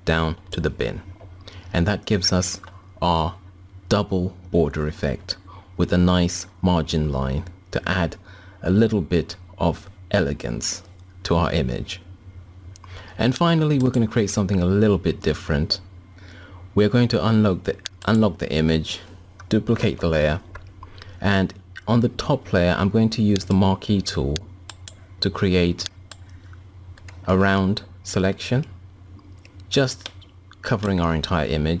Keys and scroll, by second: 19.3 ctrl+j.